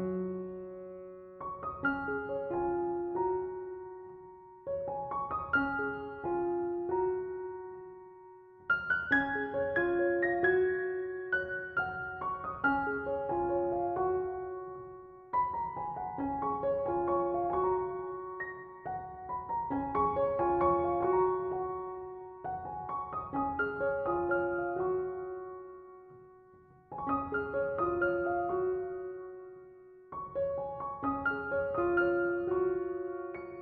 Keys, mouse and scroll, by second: 2.6 click, 3.5-9.3 middle drag, 9.3 s, 14.7-15.8 middle drag, 15.8-16.6 scroll down 1, 16.6 s, 17.9-18.9 middle drag, 18.9 s, 20.2 s, 24.4-25.3 middle drag, 25.3-25.7 scroll up 1, 25.7-27.5 middle drag, 27.5-29.8 drag, 29.8-31.5 middle drag, 31.5-33.6 drag.